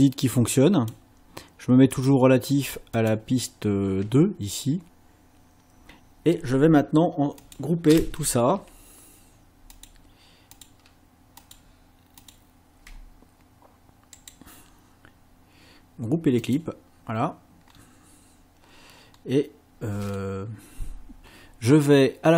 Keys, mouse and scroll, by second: 0.0 click, 2.0 click, 3.0 click, 7.4 click, 9.8 ctrl+click, 10.6 ctrl+click, 11.4 ctrl+click, 12.2 ctrl+click, 14.2 right click, 16.4 click, 17.7 scroll up 1, 19.0 scroll up 2.